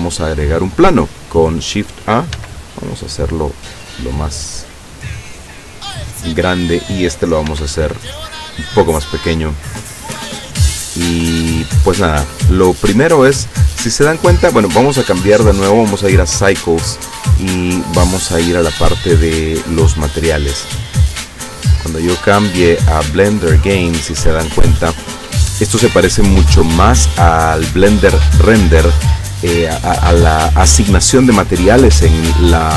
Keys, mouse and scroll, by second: 0.8 click, 2.4 s, 5.8 click, 6.7 right click, 7.6 s, 8.7 click, 10.3-11.9 drag, 12.0-13.8 middle drag, 14.7 click, 15.8 click, 17.8-18.9 middle drag, 19.4 click, 21.7 click, 23.2 click, 30.3-31.2 scroll down 3, 31.6-32.7 scroll up 4.